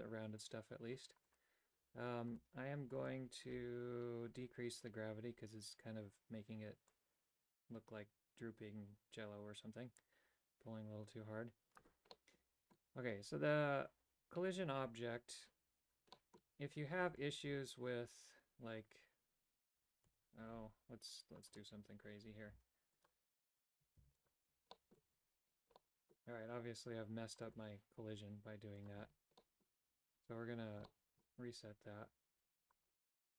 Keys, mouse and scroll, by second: 1.4-2.6 right drag, 7.1-11.9 drag, 12.3 middle click, 16.2 middle click, 17.3 Tab, 20.6 ctrl+r, 22.6 w, 24.2 w, 24.9 middle click, 25.3 Tab, 26.0 middle click, 27.7 right click, 28.9 click, 29.5 middle click, 31.1 shift+middle click, 32.9 right click.